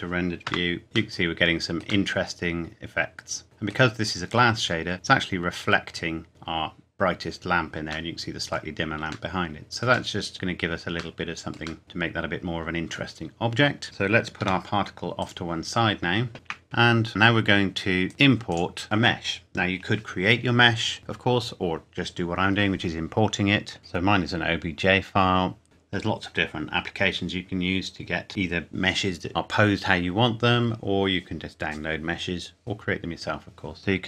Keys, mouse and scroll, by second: 0.5 KP_0, 0.8-2.0 scroll down 1, 2.0 middle click, 4.6-5.2 scroll down 1, 8.1 middle click, 9.0-10.1 scroll up 1, 10.1 middle click, 10.3 scroll down 1, 11.8 middle click, 13.2 scroll up 1, 13.8 click, 14.4 g, 15.2 click, 16.3 a, 16.6-17.1 scroll up 1, 17.1 shift+a, 18.1 click, 23.8 click, 25.6 scroll up 1, 33.8 KP_Decimal.